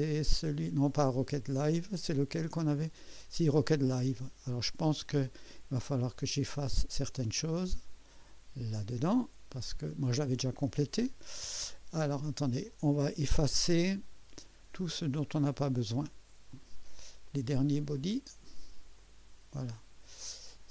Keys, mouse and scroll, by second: 3.9 click, 5.2-8.1 drag, 11.1-11.6 scroll down 3, 12.0-12.3 scroll up 2, 14.3 click, 16.5 click, 17.3 click, 18.9 click, 20.5 click.